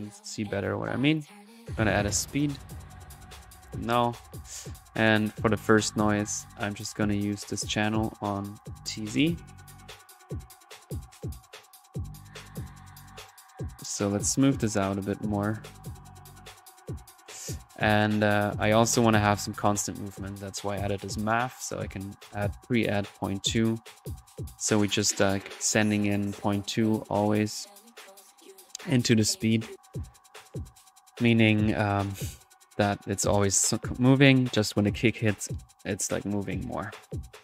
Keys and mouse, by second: 1.4-2.1 typing, 1.6 click, 2.4 click, 2.5-4.4 drag, 3.7 alt+n, 4.4 alt+middle click, 5.2 alt+drag, 5.6-6.4 drag, 6.5-7.4 drag, 7.5-8.7 drag, 10.4 drag, 10.7 click, 11.5-17.2 drag, 17.2 click, 18.3 middle click, 18.6 click, 21.5 click, 25.5-26.0 middle drag, 26.0 click, 27.7-28.7 middle drag, 28.7 click, 29.0 middle click, 29.4 click, 29.6 1, 30.4 click, 31.3 click, 34.3-37.4 drag, 34.6 typing.